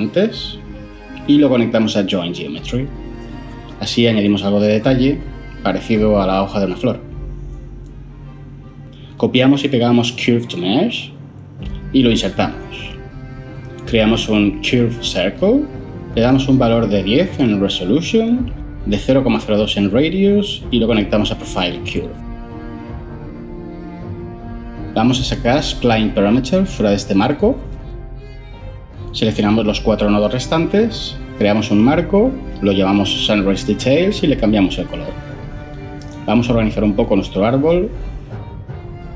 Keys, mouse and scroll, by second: 10.3 ctrl+c, 10.8 ctrl+v, 13.7 ctrl+shift+a, 14.0-15.1 typing, 15.3 Return, 17.6-19.0 typing, 31.3 ctrl+j, 31.9 F2, 32.3-33.6 typing, 33.7 Return.